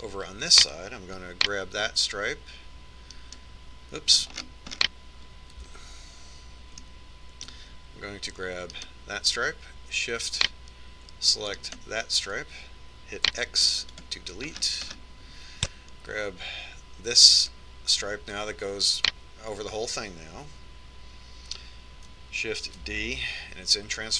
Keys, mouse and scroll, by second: 0.5-3.1 right drag, 4.7-5.9 right drag, 5.9 middle click, 6.5 click, 7.1 a, 8.2 middle click, 10.3 middle click, 10.4 right click, 13.2-14.9 right drag, 14.9 x, 16.1-18.5 middle drag, 19.0-20.7 right drag.